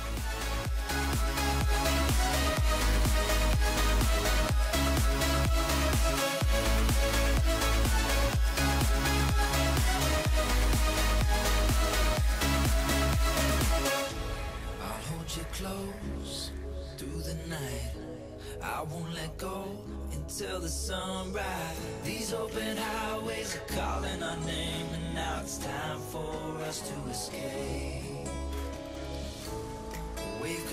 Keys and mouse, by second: 1.4-3.4 drag, 4.4-7.3 drag, 8.9-9.7 drag, 12.3-13.4 drag, 14.3-16.7 drag, 17.9-19.1 drag, 19.9 click, 20.7-22.3 drag, 23.4-25.8 drag, 27.1-27.8 drag, 29.3-30.7 drag.